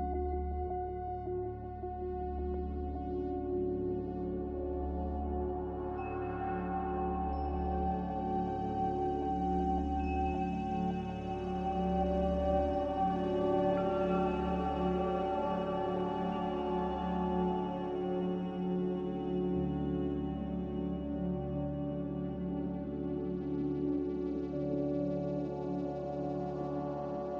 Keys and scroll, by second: 2.1 Escape, 9.5 z, 13.5-14.6 typing, 15.2 Return, 23.7 5, 24.7 BackSpace, 25.2 6, 25.8 ., 26.4 Return.